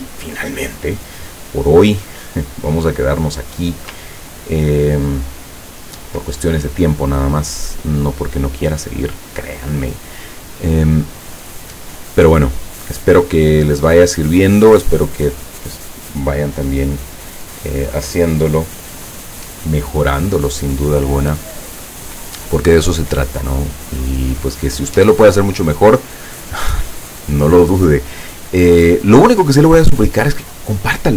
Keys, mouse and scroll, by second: 4.1-5.1 ctrl+scroll up 6, 5.5 ctrl+scroll down 2.